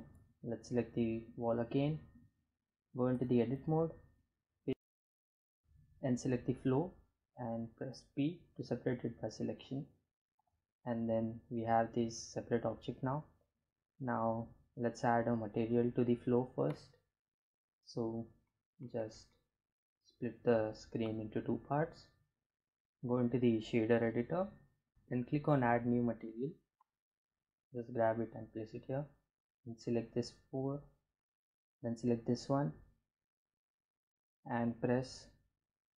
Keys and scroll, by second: 0.8 Tab, 5.5 p, 7.1 Tab, 26.3 g.